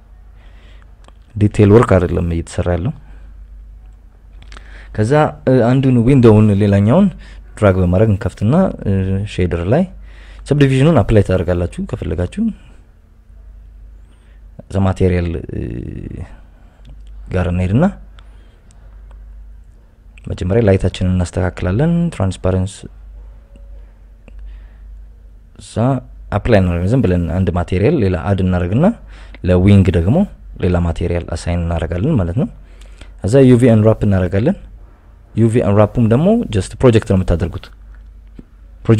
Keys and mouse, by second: 0.3 click, 2.3 Tab, 2.8 KP_1, 3.4 KP_7, 4.5 KP_Subtract, 5.6 click, 7.3 click, 7.9 click, 9.3 click, 10.1-10.7 drag, 11.1 n, 12.3-12.7 drag, 13.7 Tab, 14.1-14.4 KP_Add, 14.9 ctrl+z, 15.2 ctrl+z, 15.6 Tab, 16.1 ctrl+KP_Add, 16.2 ctrl+KP_Add, 17.9 drag, 18.1-18.7 drag, 19.5 click, 20.0 click, 21.1 click, 22.9 click, 23.3 click, 23.7 click, 24.0 click, 24.9 click, 25.3 click, 25.9 click, 26.3 click, 27.8 click, 28.0 click, 29.3 ctrl+i, 29.8 ctrl+KP_Add, 30.7 click, 31.1 click, 31.4 click, 33.4 click, 35.1 u, 36.9 KP_Subtract, 37.0 KP_Subtract, 38.1 click.